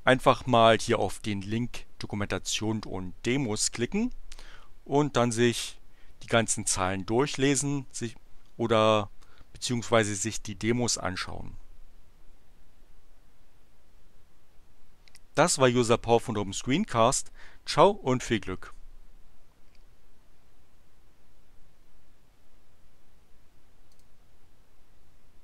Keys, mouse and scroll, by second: 6.6-9.3 drag, 23.8 click.